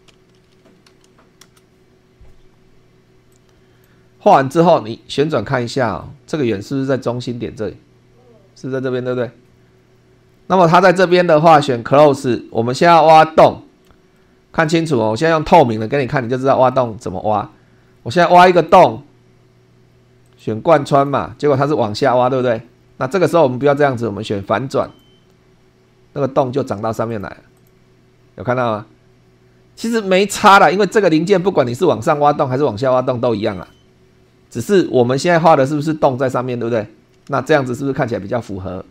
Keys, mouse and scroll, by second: 0.1 3, 0.8 /, 1.0 2, 1.4 Return, 3.3-4.0 drag, 4.6-5.9 middle drag, 6.0 shift+middle click, 6.6-11.3 shift+middle drag, 12.0 click, 13.2-14.0 middle drag, 14.2 shift+middle click, 15.0 shift+scroll down 2, 15.5 shift+middle click, 16.1-16.9 shift+middle drag, 18.5 click, 20.2 click, 20.9 click, 24.8 click, 27.1 click, 27.5 click, 30.4-32.3 middle drag.